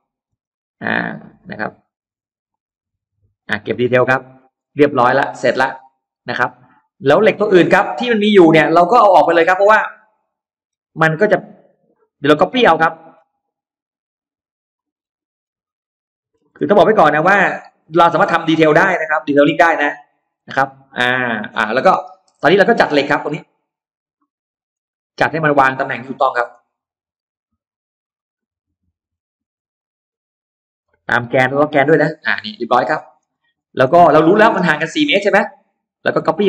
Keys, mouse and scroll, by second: 0.1 space, 0.3 click, 1.1-1.4 scroll up 2, 1.4 s, 2.3 click, 3.2 click, 3.6 space, 3.7 middle click, 4.1 scroll down 1, 4.4 middle click, 5.8 click, 6.3 scroll down 2, 6.5 middle click, 7.6 middle click, 7.6 scroll up 2, 8.0 scroll down 2, 8.4 middle click, 9.0-9.3 scroll down 1, 9.5 scroll up 1, 10.6 e, 10.8 click, 11.4-11.8 scroll down 1, 12.2-12.6 scroll up 1, 12.3 middle click, 13.2-14.0 scroll up 2, 14.2 click, 14.8-15.5 scroll down 2, 15.8 middle click, 16.3-16.6 scroll up 2, 17.0 click, 17.8 scroll down 1, 18.4-19.2 scroll up 2, 19.4 click, 20.1-21.4 scroll down 4, 20.8 middle click, 21.6 scroll up 2, 21.8 middle click, 22.0-22.4 scroll down 1, 22.4 space, 22.4-23.2 scroll up 1, 23.4 click, 24.0 middle click, 24.5-24.8 scroll down 1, 24.8-25.2 scroll up 1, 25.2 middle click, 25.8 middle click, 26.2 m, 26.6 click, 28.1 click, 28.6 scroll up 2, 29.6 click, 31.9 shift+click, 32.2-32.5 scroll down 2, 32.5 middle click, 33.0 middle click, 33.8 middle click, 34.3-34.6 scroll up 2, 34.8 middle click, 35.8 click.